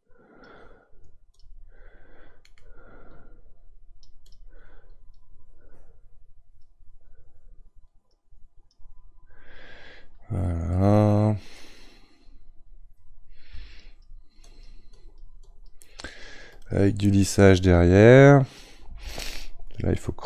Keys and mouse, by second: 4.9-20.2 drag.